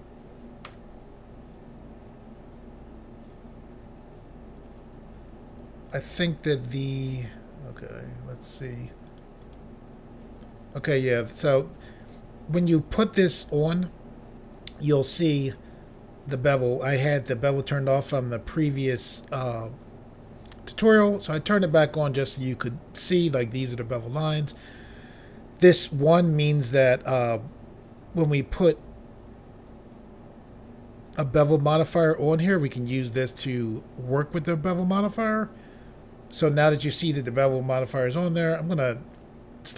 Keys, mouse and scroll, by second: 0.7 Return, 5.9 click, 9.1 click, 9.4 click, 9.6 double click, 11.1 click, 15.5 click, 38.3 click.